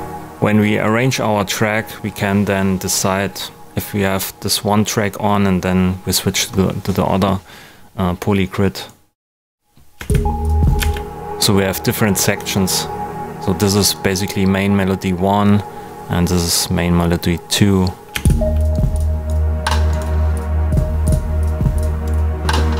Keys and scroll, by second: 9.9 space, 18.1 space.